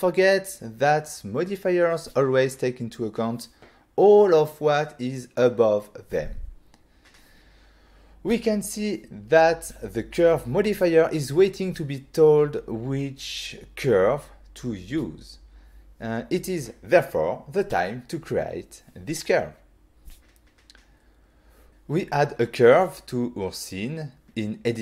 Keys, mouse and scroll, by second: 3.2 click, 7.8 click, 21.6 shift+a, 23.8 click, 24.2 click, 24.5 middle click.